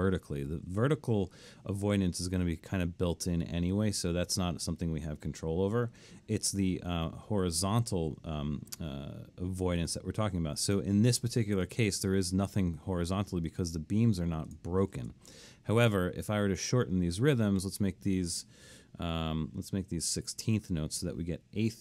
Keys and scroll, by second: 15.0 super+z, 19.9-21.0 typing.